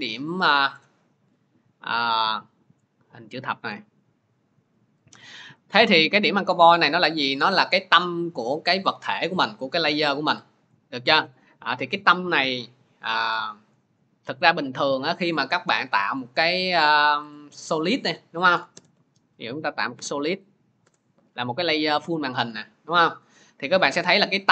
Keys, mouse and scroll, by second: 0.6 scroll, 4.2-4.8 scroll, 5.1 scroll, 14.7 click, 16.0 click, 18.6 ctrl+y, 20.7 Return, 21.8-22.2 scroll, 22.9-23.5 scroll, 23.8-24.2 scroll.